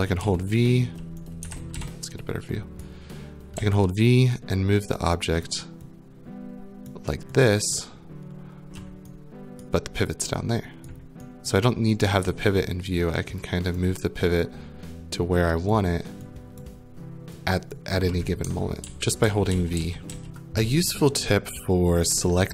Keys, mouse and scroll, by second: 0.2-2.6 typing, 2.8 right click, 3.6-8.8 typing, 5.4 click, 6.9 click, 7.7 right click, 9.6 right click, 10.8 right click, 11.5 right click, 12.2-18.0 typing, 13.8 click, 14.4 right click, 15.7 right click, 16.6 right click, 17.7 click, 18.8 ctrl+z, 19.2 ctrl+z, 19.8 ctrl+z, 20.1 ctrl+z, 20.2 right click, 20.2 click, 20.2 scroll, 20.2 s.